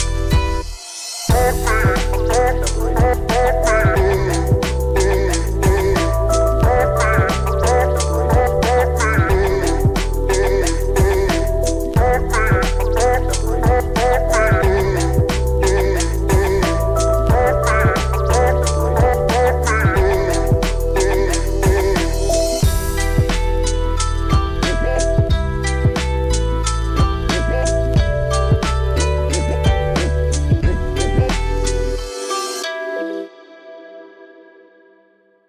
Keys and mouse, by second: 2.1 shift+middle click, 3.1 shift+middle click, 4.7 g, 5.1 x, 8.5 shift+middle click, 10.3 shift+middle click, 11.8 g, 12.0 x, 16.5 shift+click, 17.5 shift+middle click, 18.4 middle click, 19.5 g, 20.1 y, 21.4 click, 22.1 middle click, 22.8 shift+middle click, 23.5 shift+a, 28.2 middle click, 30.4-31.8 drag, 31.8 s, 33.2 Tab, 34.2 e.